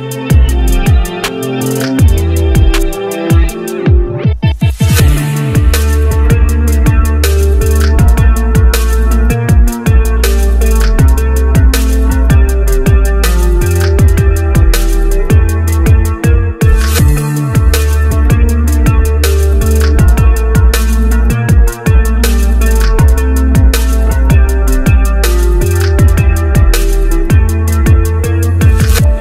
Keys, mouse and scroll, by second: 0.8 shift+Page_Down, 8.5 ctrl+z, 9.4 scroll up 1, 12.4 scroll down 1, 14.9 right click.